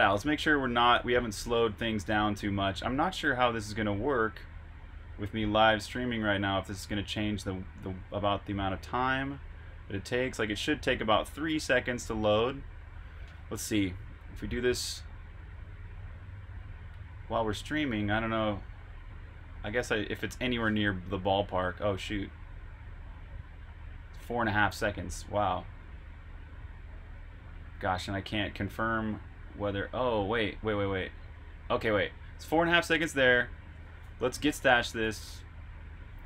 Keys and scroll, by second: 20.3 super+q, 32.5 super+Tab, 34.9 typing.